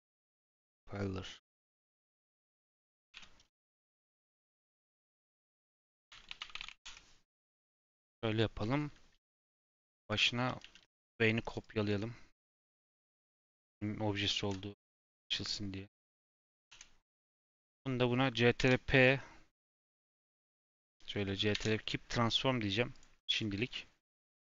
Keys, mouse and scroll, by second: 1.4 click, 1.7 click, 1.9 F2, 9.8-11.1 drag, 11.4 click, 11.6-14.6 drag, 17.6 ctrl+click, 18.5 ctrl+p, 19.7 click, 20.0 click, 20.6 shift+click, 21.5 ctrl+p, 23.2 click, 23.6-24.1 scroll down 1, 24.1 click.